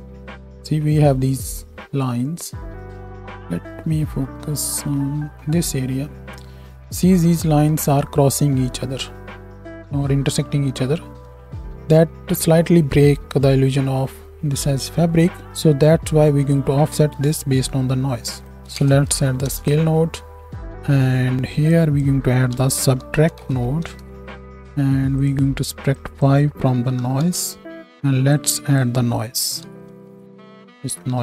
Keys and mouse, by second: 20.6-21.7 drag, 25.2 click, 30.2 Down.